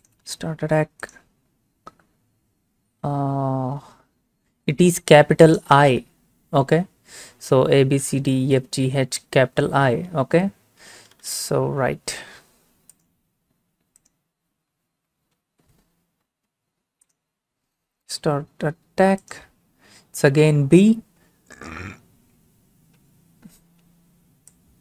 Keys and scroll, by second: 15.4 l.